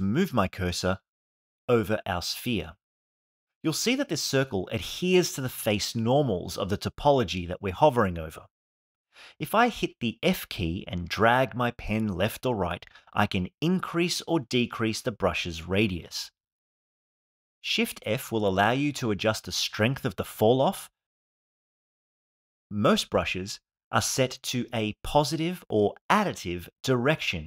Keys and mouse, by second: 9.0 f, 15.7 click, 18.2 shift+f, 21.4 click, 21.9 click, 23.0 click.